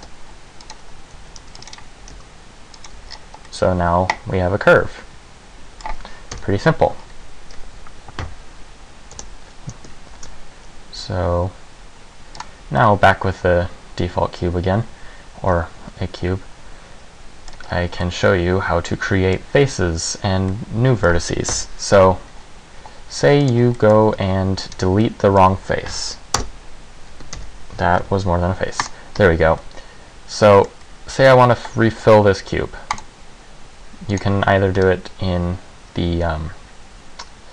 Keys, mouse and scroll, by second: 0.1 ctrl+r, 1.3 a, 1.6 c, 2.0 click, 2.1 g, 3.0 click, 3.1 Tab, 3.3 scroll down 4, 3.6 middle click, 6.5 KP_1, 8.4 Delete, 10.3 shift+a, 12.9 middle click, 17.7 scroll up 3, 18.2 middle click, 20.7 middle click, 21.7 KP_1, 22.1 Tab, 23.5 click, 23.9 middle click, 24.3 z, 24.8 right click, 25.1 middle click, 26.0 Delete, 27.5 ctrl+z, 28.1 Delete, 29.7 middle click, 30.9 middle click, 33.0 click, 34.2 click, 34.9 right click.